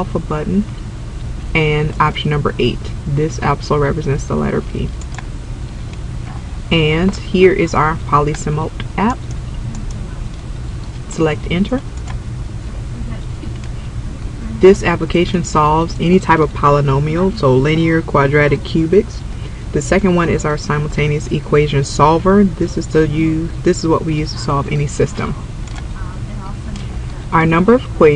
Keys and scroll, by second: 5.1 8, 9.3 Down, 9.9 Down, 12.1 Return, 25.8 2.